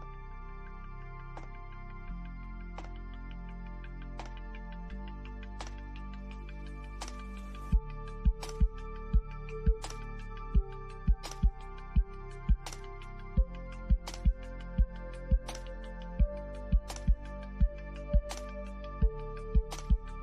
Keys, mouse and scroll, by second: 1.8 middle click, 2.9 scroll down 1, 4.3-8.7 middle drag, 8.7 click, 10.3 Right, 13.7 click, 16.5 click, 18.6 scroll up 1, 19.8 click.